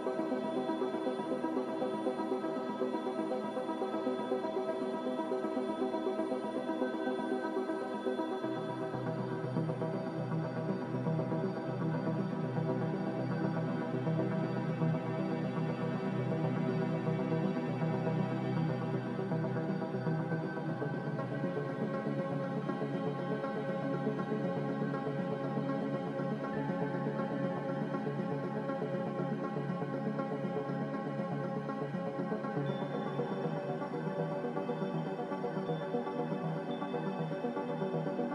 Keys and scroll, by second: 2.3 z, 4.9 z, 17.5 ctrl+z, 21.1 Delete, 23.5 Delete, 32.5 c.